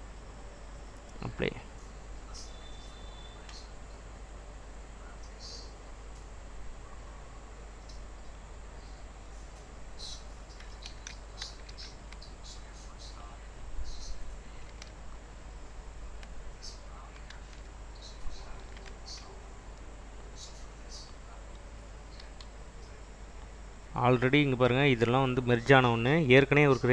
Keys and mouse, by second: 0.5-4.9 drag, 7.3 click, 11.0 ctrl+z, 11.6 ctrl+z, 12.0 ctrl+z, 18.9 ctrl+z, 19.1 ctrl+z, 19.7 click, 20.7 click, 22.4 g.